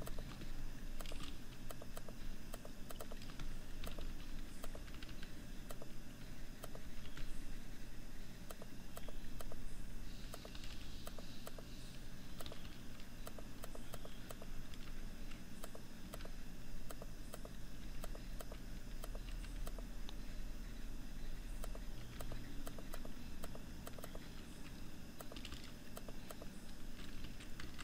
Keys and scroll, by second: 26.7 ctrl+-, 27.1 ctrl+=.